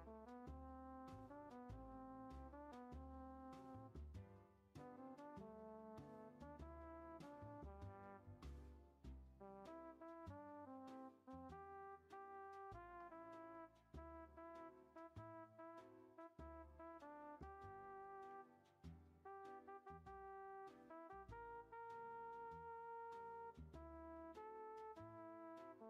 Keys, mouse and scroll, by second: 0.4 e, 2.9 middle drag, 3.2 scroll up 2, 3.5 ctrl+z, 4.6 ctrl+z, 5.0 ctrl+z, 5.6 ctrl+z, 6.6 ctrl+z, 7.0 ctrl+z, 7.3 ctrl+z, 8.0-9.3 middle drag, 9.3-10.4 scroll up 2, 10.4 ctrl+a, 12.0 click, 12.7 ctrl+a, 17.3 scroll up 1, 17.4 middle click, 17.8-18.4 scroll down 1, 18.4 click, 19.7-21.0 drag, 22.6-24.6 drag.